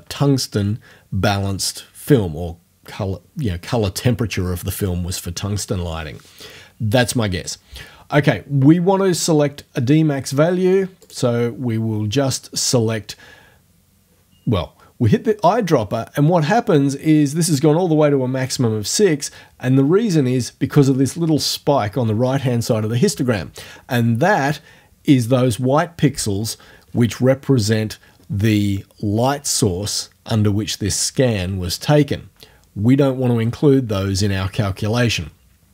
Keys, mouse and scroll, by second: 11.0 click.